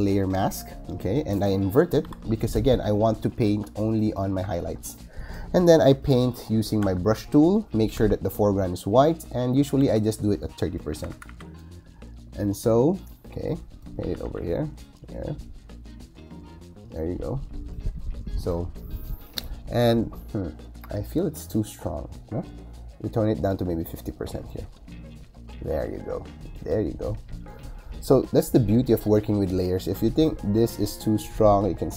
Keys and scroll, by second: 1.9 super+i, 6.7 b, 8.8 x, 9.7 3, 12.2 ], 13.9 ].